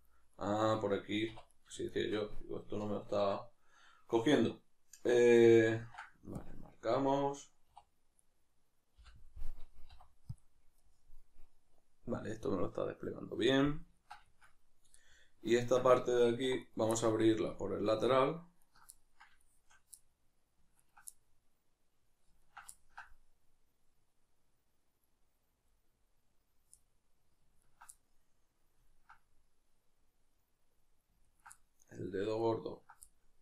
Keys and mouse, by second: 0.4 right click, 1.3 2, 1.5 right click, 1.9-5.8 shift+right drag, 5.8 ctrl+e, 8.2 right click, 10.8-16.6 middle drag, 16.4 2, 16.6 right click, 16.9-17.9 middle drag, 17.9 ctrl+right click, 18.9-20.8 middle drag, 20.8 ctrl+right drag, 21.2-22.4 middle drag, 22.4 ctrl+right drag, 22.8-27.6 ctrl+middle drag, 27.6-28.0 ctrl+right drag, 28.0-31.3 middle drag, 31.3 ctrl+right click, 31.6-32.4 middle drag, 32.4-33.0 ctrl+right drag, 33.0-33.4 middle drag.